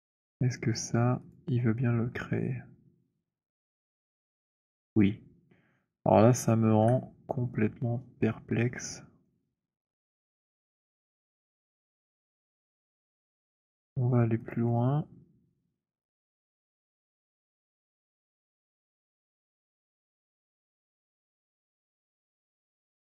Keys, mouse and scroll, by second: 1.4 click, 3.7 click, 6.7 ctrl+z, 9.2 alt+click, 10.2 alt+middle click, 10.9 click, 12.2 click, 14.3 click, 16.8 click, 18.4 click, 19.8 click, 22.4 alt+click.